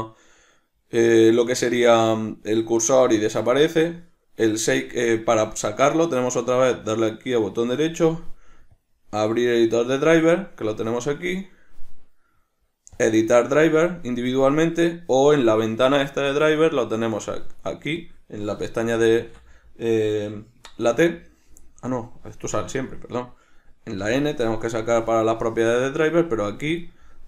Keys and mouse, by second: 17.6 click, 18.1 click, 18.9 n, 26.4 click, 26.9 click.